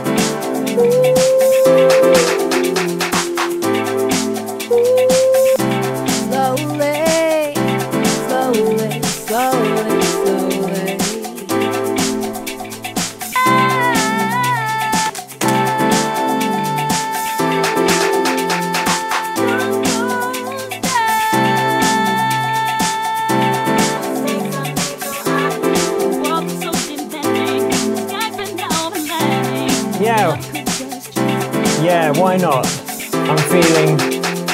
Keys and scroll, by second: 15.0 space.